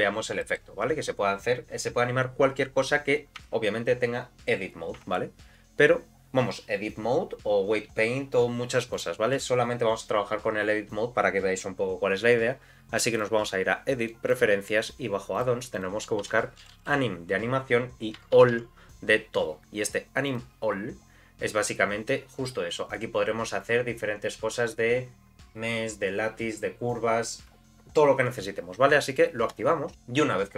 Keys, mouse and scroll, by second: 0.4 shift+middle click, 0.9-1.4 scroll up 1, 1.4 scroll down 1, 3.4 Tab, 5.0 Tab, 8.9-13.3 drag.